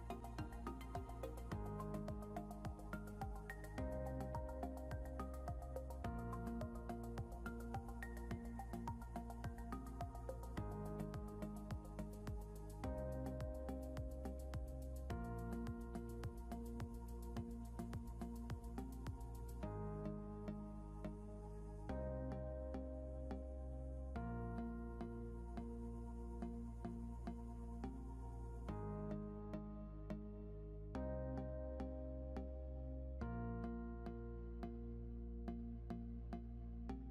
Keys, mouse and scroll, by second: 8.4 typing, 10.2-11.3 typing, 15.1 click, 34.2 click.